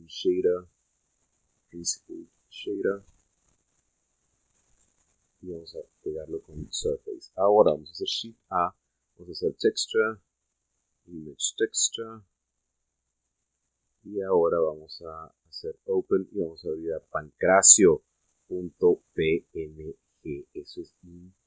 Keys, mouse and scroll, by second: 2.7 click, 3.6 click, 4.1 middle click, 5.7 click, 6.9-8.0 middle drag, 8.9 shift+a, 12.1 click, 13.2 click, 13.6 middle click, 14.6-15.3 drag, 15.7 click, 17.0 click, 19.9-21.4 middle drag.